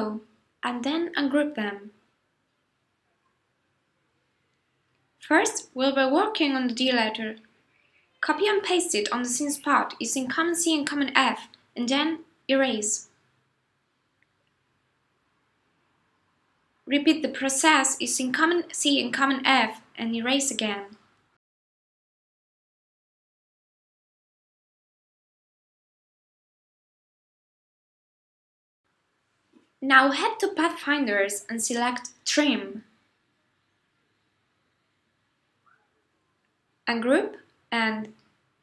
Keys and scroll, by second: 1.5 shift+super+g, 8.0 super+c, 8.4 super+f, 20.7 super+c, 21.0 super+f, 28.2 super+y.